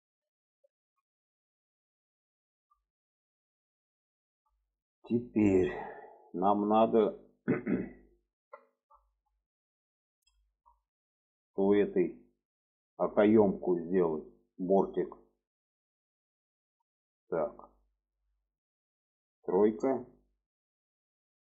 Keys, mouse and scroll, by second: 0.9 alt+z, 1.7 middle click, 2.5 middle click, 3.6 middle click, 4.2 shift+middle click, 5.0 middle click, 5.6 middle click, 6.4 shift+middle click, 7.1 middle click, 7.9 alt+middle click, 8.8 shift+middle click, 9.9 shift+middle click, 10.9 middle click, 11.6 shift+middle click, 12.3 middle click, 12.8 shift+middle click, 14.1 middle click, 15.1-17.0 middle drag, 17.3 shift+middle drag, 20.3 click, 21.0 middle click.